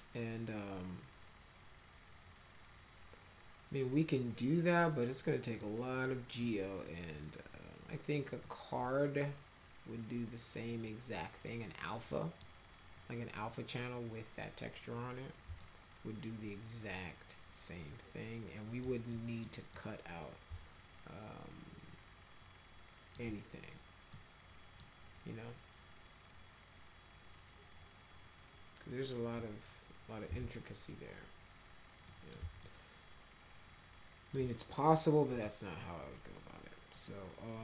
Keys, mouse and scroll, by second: 5.6-6.4 middle drag, 8.5-12.4 middle drag, 15.6-18.8 alt+middle drag, 19.1 middle click, 19.7-23.1 middle drag, 24.1 middle click, 29.4 middle click, 30.3 z, 32.1 middle click, 32.6-34.3 alt+middle drag, 35.3 click.